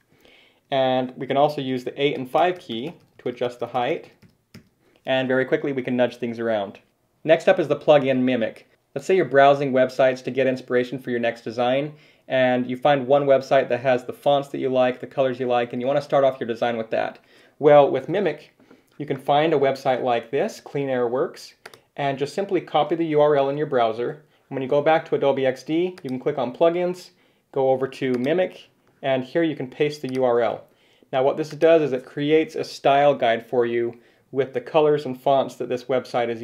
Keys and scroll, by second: 0.4 ctrl+6, 2.3 ctrl+8, 3.4 ctrl+5, 18.7 super+Tab, 22.9 super+c, 24.0 super+Tab, 30.3 super+v.